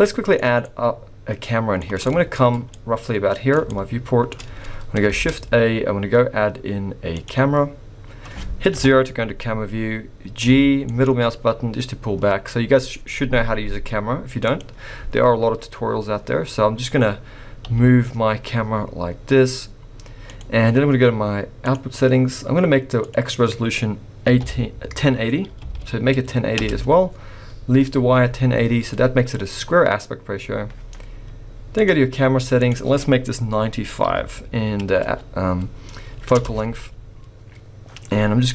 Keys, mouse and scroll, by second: 0.6 middle click, 2.0 shift+middle click, 2.0-2.8 shift+scroll up 3, 2.7 middle click, 3.6 shift+middle click, 5.1 shift+a, 8.8 KP_0, 10.4 g, 15.9-17.7 scroll up 2, 17.7 g, 21.6 click, 23.1 click, 28.9-31.7 scroll down 1, 31.7 click, 31.7 scroll down 3, 32.6 click.